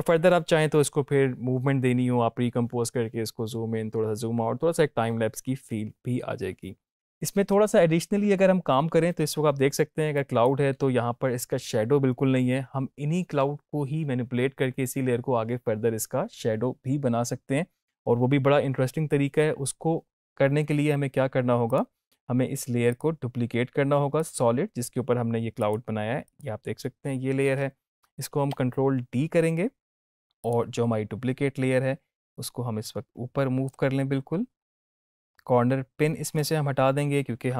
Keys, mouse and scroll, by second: 10.1 click, 21.6 click, 28.3 ctrl+d, 30.3-33.8 drag, 36.1-37.5 scroll down 1.